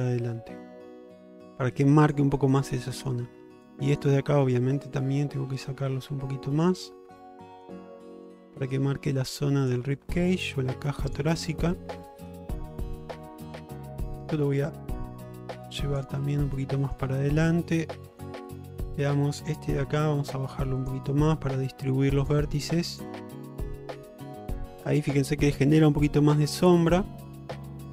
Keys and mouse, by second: 2.4 shift+middle click, 2.7-3.2 middle drag, 4.0 shift+click, 4.3 middle click, 5.0-6.7 drag, 6.9 middle click, 8.0 middle click, 8.8 click, 10.0 middle click, 11.4 middle click, 12.2 shift+middle click, 12.8 click, 13.8 middle click, 15.1 click, 16.3 middle click, 16.9 shift+middle click, 17.2 middle click, 18.1 shift+middle click, 18.8 click, 20.0 g, 21.2 middle click, 22.5 g, 23.5-23.8 middle drag, 24.0 shift+middle click, 24.3 middle click, 26.8-27.5 middle drag.